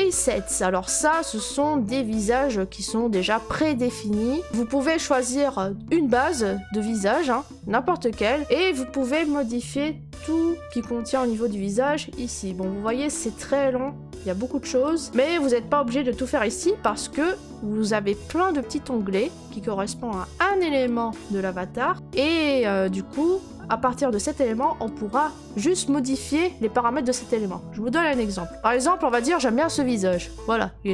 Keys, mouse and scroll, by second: 1.4 click, 3.1 middle click, 3.2 middle click, 3.2 middle click, 3.3 middle click, 4.0 click, 4.5 middle click, 4.5 middle click, 4.5 click, 4.8 middle click, 4.8 middle click, 4.9 middle click, 4.9 middle click, 6.3 middle click, 6.3 middle click, 6.4 middle click, 7.3 click, 7.8-8.2 middle click, 7.8 middle click, 7.8 middle click, 7.9 middle click, 8.2 middle click, 8.3 middle click, 10.6-12.8 scroll, 15.0 click, 17.1 click, 28.2 scroll, 28.5 middle click, 28.7 click.